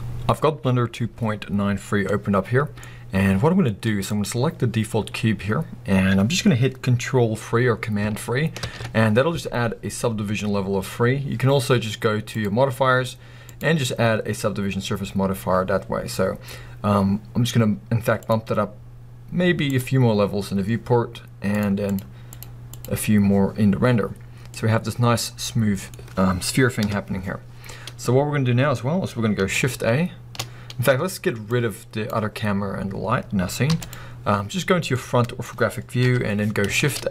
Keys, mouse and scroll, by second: 2.1-4.1 middle drag, 3.0-4.1 scroll up 2, 4.1 click, 5.1-8.1 scroll up 2, 8.1-8.6 scroll up 1, 8.6 ctrl+3, 9.3-10.4 scroll up 2, 10.4-12.3 scroll up 1, 12.3 click, 13.9-24.5 drag, 15.8-17.0 scroll up 2, 17.0-18.2 scroll up 1, 24.5-26.9 middle drag, 26.8 KP_1, 28.0 scroll up 1, 28.1-28.8 scroll down 2, 28.2-31.5 middle drag, 28.8-30.1 scroll down 1, 30.1-31.5 scroll down 1, 31.5-32.0 drag, 32.3-33.7 scroll up 1, 33.7 x, 34.4 scroll up 1, 34.9-37.1 middle drag, 36.0 KP_1, 36.8 shift+a.